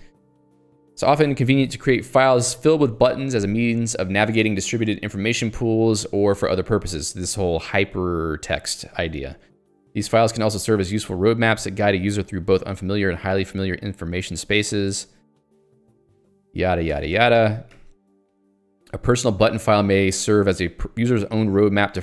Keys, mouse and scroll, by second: 0.8 j, 18.6 k.